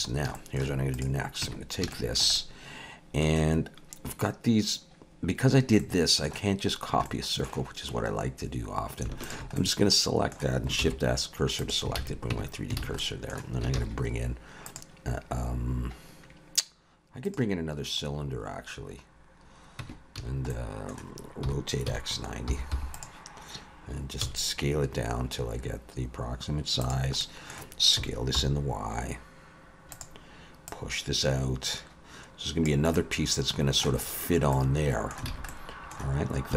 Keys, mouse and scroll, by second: 0.0 scroll up 2, 0.4 shift+middle click, 1.0 click, 1.4 Tab, 1.9 shift+middle click, 2.4 middle click, 5.8 middle click, 6.8 scroll down 1, 7.1 middle click, 9.2 alt+shift+click, 9.6 middle click, 10.8 shift+s, 12.0 alt+a, 12.3 Tab, 12.8 alt+a, 13.0 middle click, 13.8 shift+a, 18.1-18.6 scroll down 2, 19.8 Tab, 20.2 a, 20.5 middle click, 21.4 r, 24.2 s, 27.2 middle click, 28.0 s, 30.7 click, 32.9 middle click, 34.1-35.3 scroll up 3, 34.5 middle click, 35.3 alt+a, 35.5 middle click, 36.5 2.